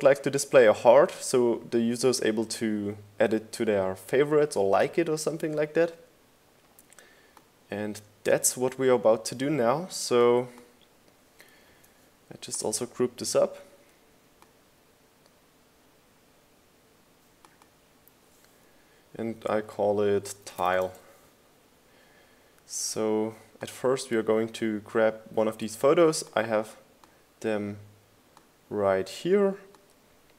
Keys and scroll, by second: 14.4 super+g, 22.8-23.8 typing, 24.3 Return.